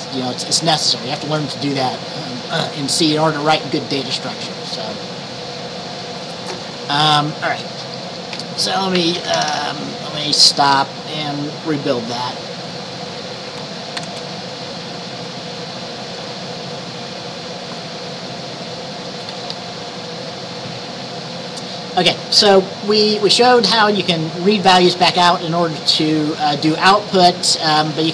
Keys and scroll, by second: 14.1 ctrl+b.